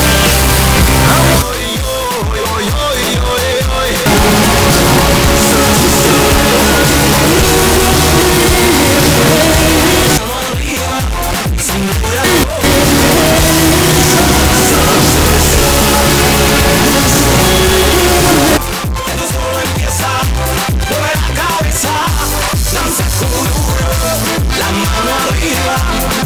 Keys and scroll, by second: 1.4 Page_Down, 10.2 Page_Down, 19.2 Page_Down.